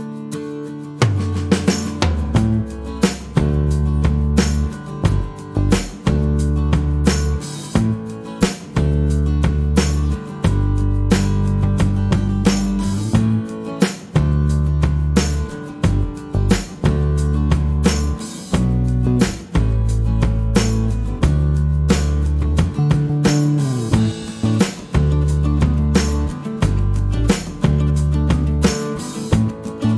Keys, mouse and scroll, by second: 2.4 click, 5.4 click, 7.4-9.6 drag, 9.9 click, 11.2 click, 13.6 click, 15.6 ctrl+v, 16.6 click, 18.4 click, 19.4-22.5 drag, 25.2 click, 28.9 click.